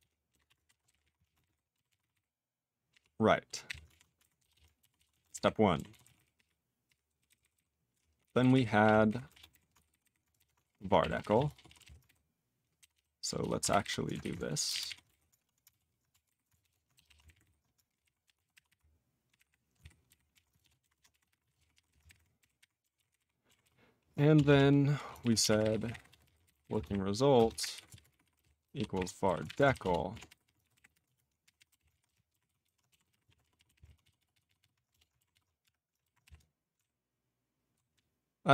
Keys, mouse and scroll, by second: 0.0-1.5 typing, 1.9 ctrl+s, 2.0 ctrl+a, 2.1 ctrl+n, 2.9 ctrl+p, 3.4 ctrl+p, 3.6 ctrl+k, 3.8 alt+f, 4.2 alt+b, 4.4 /, 4.5 /, 5.0 ctrl+s, 5.1 ctrl+a, 5.2 ctrl+space, 5.3 ctrl+g, 5.8 ctrl+s, 6.0 ctrl+n, 6.0 ctrl+a, 6.1 ctrl+n, 6.3 ctrl+p, 6.8 ctrl+p, 7.3 ctrl+n, 7.4 ctrl+n, 7.5 ctrl+n, 7.9 ctrl+p, 8.2 ctrl+n, 8.3 ctrl+n, 8.5 ctrl+n, 8.8 ctrl+p, 9.1 ctrl+n, 9.2 ctrl+space, 9.3 ctrl+e, 9.5 ctrl+g, 9.7 alt+b, 9.8 alt+b, 10.0 alt+b, 10.3 ctrl+>, 10.6 alt+d, 10.7-12.3 typing, 12.8 ctrl+/, 12.9 ctrl+/, 13.4 ctrl+/, 13.6 alt+b, 13.8 alt+b, 14.2 alt+b, 14.6 ctrl+space, 14.7 ctrl+e, 14.7 ctrl+n, 14.8 ctrl+e, 15.0 alt+w, 15.7 ctrl+a, 16.1 alt+f, 16.2 alt+b, 16.6 ctrl+<, 16.9 /, 17.1 /, 17.2 ctrl+g, 17.3 ctrl+e, 17.4 ctrl+n, 17.9 ctrl+p, 18.0 ctrl+e, 18.2 ctrl+p, 18.3 ctrl+a, 18.5 ctrl+o, 18.6 ctrl+y, 19.2 ctrl+p, 19.3 Tab, 19.7 alt+b, 20.0 alt+b, 20.3 alt+f, 20.6 ctrl+>, 20.8 ctrl+BackSpace, 20.9-22.3 typing, 22.5 ctrl+e, 23.0 ctrl+n, 23.0 ctrl+n, 23.1 ctrl+e, 23.6 ctrl+s, 24.3 Return, 24.5 Return, 24.9-34.2 typing, 29.2 alt+b, 29.7 ctrl+e, 34.3 ctrl+s, 34.4 ctrl+s, 34.5 ctrl+s, 34.9 Return, 35.3 ctrl+s.